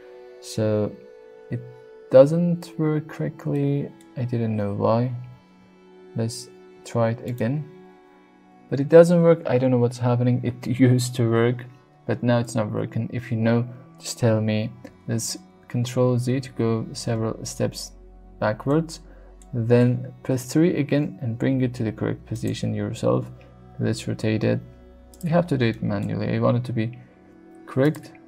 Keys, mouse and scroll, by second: 3.5-4.0 middle drag, 5.2 g, 7.2 ctrl+right click, 12.7 KP_3, 15.0 ctrl+z, 15.3 ctrl+z, 15.6 ctrl+z, 16.4 ctrl+shift+z, 18.7 middle click, 20.3 KP_3, 21.3 g, 22.3 click, 23.1 r, 25.1 click, 25.7 shift+middle click, 26.4 g, 27.8 click.